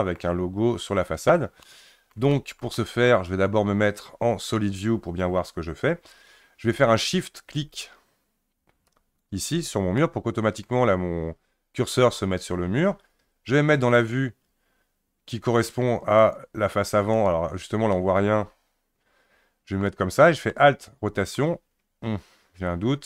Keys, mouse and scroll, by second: 4.4 click, 8.9 shift+right click, 10.0-13.0 middle drag, 14.0 click, 16.2 click, 17.1 click, 17.9-20.6 middle drag.